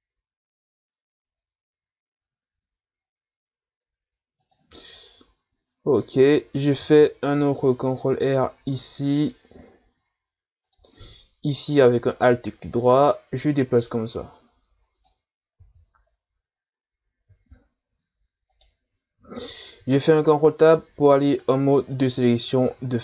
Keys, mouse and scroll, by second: 6.8 ctrl+r, 11.6 alt+right click, 12.8-15.6 drag, 15.6 z, 16.4-17.2 scroll up 1, 18.5 right click, 19.4 ctrl+Tab, 21.9 right click, 22.7 z.